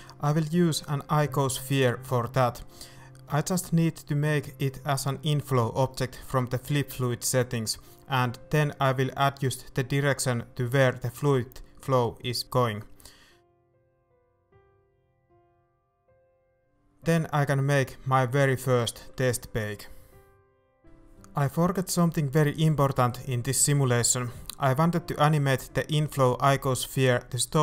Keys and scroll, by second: 0.1 shift+Tab, 0.5 shift+s, 1.1 Tab, 2.3-4.4 typing, 4.4 shift+Tab, 4.4 ctrl+s, 12.9 a, 17.0 alt+a.